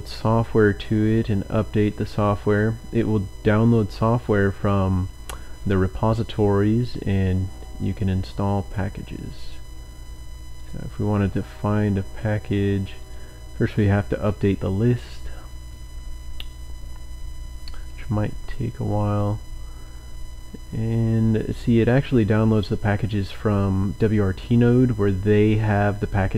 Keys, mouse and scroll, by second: 1.3-1.8 scroll down 2, 2.0-2.6 scroll up 2, 6.8-8.0 scroll down 4, 10.6 click, 11.8-12.1 scroll up 2, 13.0 click, 21.7-23.4 drag.